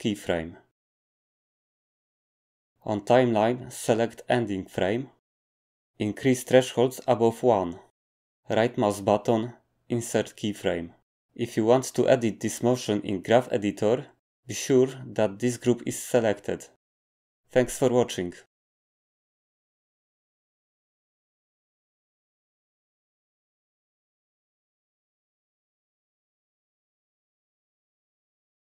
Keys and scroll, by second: 11.6 space, 13.0 Escape, 13.3 space, 14.6 Escape.